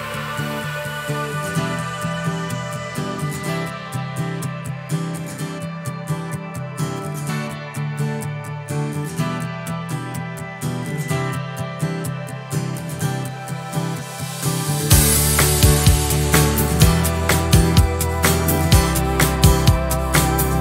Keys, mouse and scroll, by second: 1.1 shift+click, 2.1 shift+click, 3.2 shift+click, 3.8 shift+click, 4.9 shift+click, 5.7 shift+click, 7.1 shift+click, 13.2 click, 15.1 click, 17.7 click, 19.7 ctrl+KP_Add.